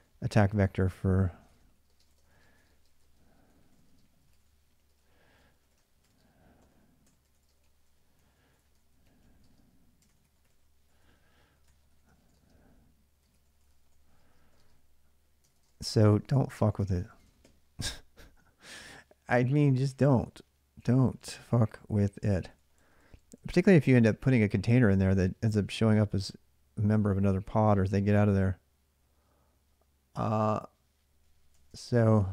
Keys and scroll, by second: 0.0-17.7 typing, 20.4-24.1 typing, 31.3-32.3 typing.